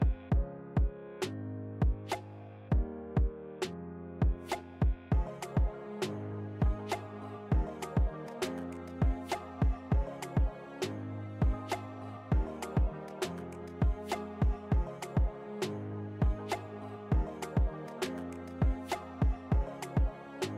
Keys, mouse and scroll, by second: 0.3-12.8 drag, 7.1 typing, 13.9 alt+scroll down 1, 13.9-14.3 typing, 15.2 click, 15.5 typing, 15.6 shift+click, 18.3 click.